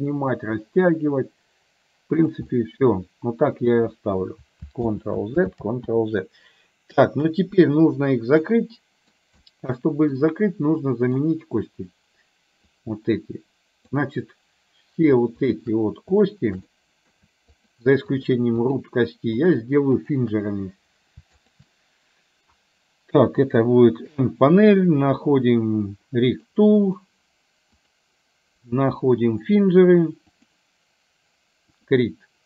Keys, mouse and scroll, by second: 2.6-3.7 middle drag, 5.0 ctrl+z, 5.6 ctrl+z, 8.6 middle click, 9.6 middle click, 11.0 middle click, 12.7-14.0 drag, 15.5 shift+click, 16.9 middle click, 18.2 shift+click, 18.6 shift+click, 19.5 shift+click, 20.0 shift+click, 21.6 shift+click, 24.1 n, 26.6 click, 27.8-30.6 drag, 31.9 click.